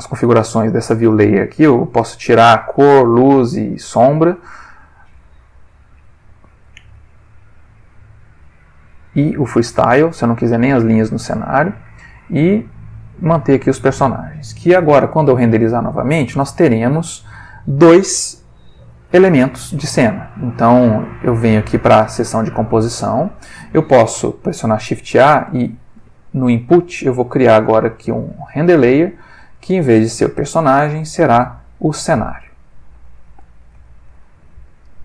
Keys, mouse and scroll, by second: 2.4 click, 3.0 click, 3.3 middle click, 3.8 click, 4.1-6.5 middle drag, 6.5 click, 9.4 click, 9.9 click, 12.3 click, 13.1 click, 21.4 click, 22.1 middle click, 23.2 click, 24.5 shift+a, 28.1 click, 29.0 click, 29.2-29.7 middle drag, 29.8 ctrl+middle click, 30.6 click, 31.5 click, 32.0 middle click, 33.1-33.8 ctrl+middle drag, 34.0 ctrl+middle click.